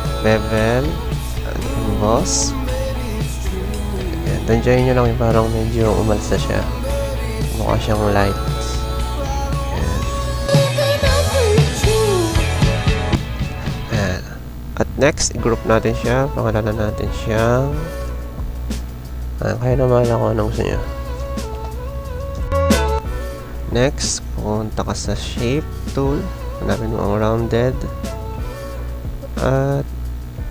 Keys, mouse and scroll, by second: 1.3 click, 2.5 click, 2.9 z, 8.1 click, 8.9 click, 11.6 click, 19.3-19.7 typing, 20.1 click, 23.0 space, 23.1 click, 23.4 space, 23.6 space, 27.9 typing, 28.3-30.5 drag.